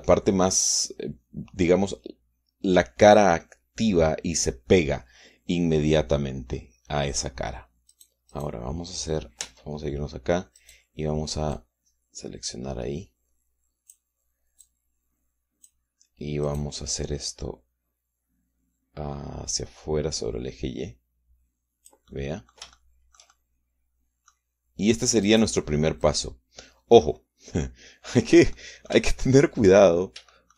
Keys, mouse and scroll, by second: 8.6 right click, 9.0 right click, 10.2 Tab, 11.3 click, 12.3-14.8 drag, 15.4-16.6 shift+drag, 17.2 click, 20.2-24.4 drag, 24.4 middle click, 26.0 click, 26.8-29.3 drag, 29.3-30.5 middle drag.